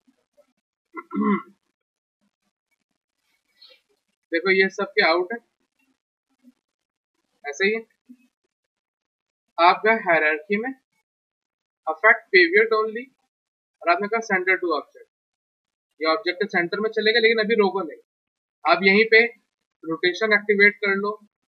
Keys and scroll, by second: 1.4 ctrl+z, 1.7 ctrl+z, 8.8 alt+q, 18.6 e, 21.2 r.